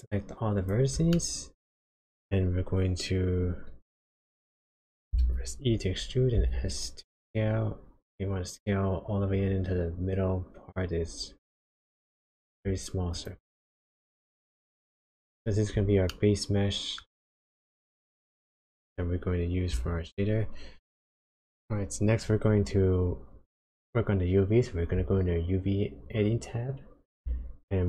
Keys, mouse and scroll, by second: 0.1 click, 1.1 shift+middle click, 5.1 e, 13.7-14.2 scroll up 4, 14.5 shift+middle click, 16.0 middle click, 17.2 shift+middle click, 18.3-18.9 scroll up 1, 18.9-20.4 scroll down 1.